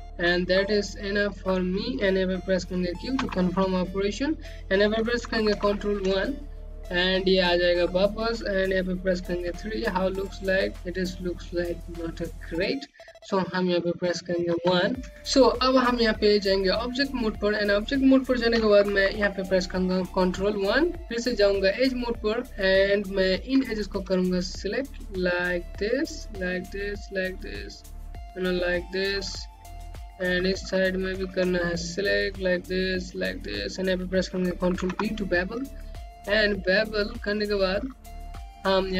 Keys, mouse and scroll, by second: 0.5-1.1 scroll down 1, 1.2 click, 3.7 q, 4.2-5.5 scroll up 1, 6.0 1, 6.6 scroll down 1, 7.1 alt+click, 10.0 3, 15.0 1, 16.7 right click, 20.1 1, 21.0 click, 21.1 right click, 21.3 Home, 24.2 click, 25.3 shift+click, 26.0 shift+click, 26.7 click, 27.5 click, 29.1 shift+click, 30.3 click, 31.4 middle click, 32.8 click, 33.6 click, 35.3 b, 36.8-37.4 scroll up 1, 38.4 alt+middle click.